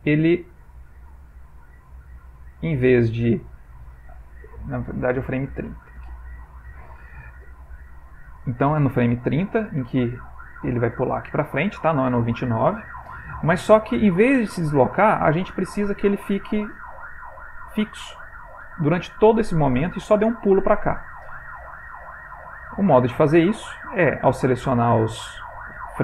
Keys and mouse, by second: 7.1 click, 7.1 g, 7.8 g, 9.4 click, 12.7 click, 13.3 click, 16.0 click, 18.0 click, 21.9 click, 24.3 click.